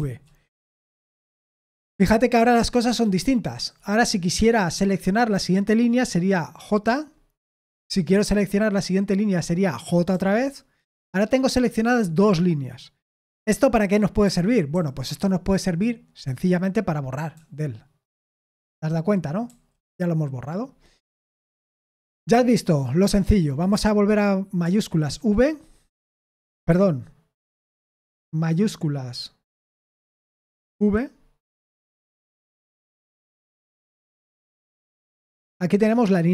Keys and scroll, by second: 2.3-3.7 typing, 6.8 j, 10.1 j, 14.2-14.7 typing, 17.3 d, 19.4 u, 25.0 ctrl+v, 26.6 Escape, 30.7 shift+v.